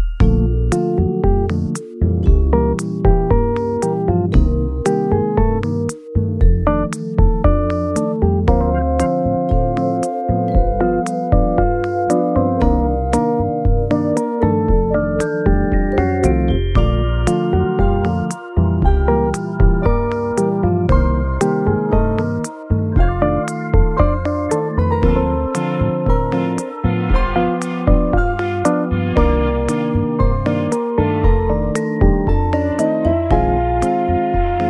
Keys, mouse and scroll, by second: 1.3 2, 3.9 shift+click, 4.7 e, 7.6 z, 9.3 shift+click, 11.2 ctrl+b, 11.2 shift+click, 11.4 ctrl+b, 13.3 scroll up 1, 13.9-14.3 scroll down 3, 14.7-16.2 scroll up 4, 16.8 right click, 18.8 Tab, 20.1 right click, 23.0 KP_0, 24.1 scroll, 24.1 scroll down 1, 24.5-25.0 scroll up 3, 25.2-26.4 scroll down 2, 28.9 g, 30.5 x.